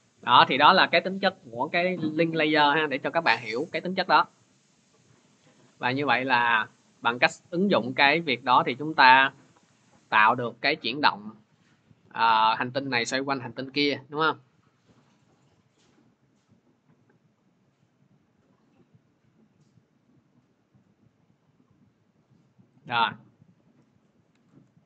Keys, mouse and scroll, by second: 0.2 click, 2.6 ctrl+z, 3.2 ctrl+z, 7.8 click, 8.1 ctrl+z, 9.0 ctrl+z, 10.2 click, 12.6-15.2 drag, 22.6 click, 24.3 alt+Tab.